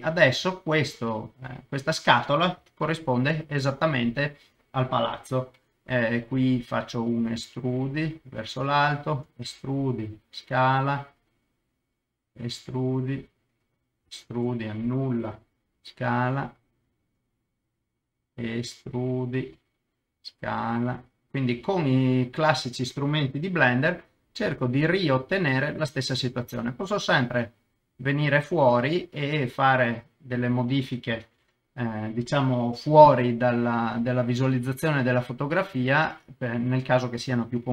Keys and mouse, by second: 0.6-2.1 middle drag, 2.6 KP_0, 6.9 e, 7.2 middle click, 8.2 click, 8.8 e, 9.1 Escape, 9.8 s, 11.6 click, 12.2 e, 13.2 click, 14.1 e, 14.3 Escape, 15.7 s, 17.0 click, 18.5 e, 19.2 click, 20.2 s, 22.8 click, 23.7 g, 23.8 middle click, 25.5 click, 25.9 middle click, 26.9 s, 27.0 middle click, 28.6 click, 28.8 middle click, 29.9 s, 30.0 middle click, 30.5 click, 31.1 KP_0, 32.9 g, 32.9 middle click, 34.3 click, 34.8 s, 34.9 middle click, 36.4 click.